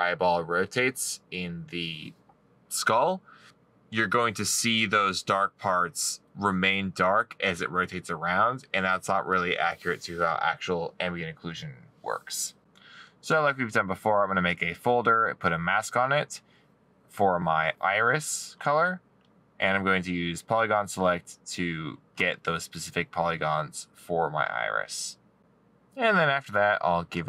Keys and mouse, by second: 1.4 middle click, 3.0 middle click, 6.9 right click.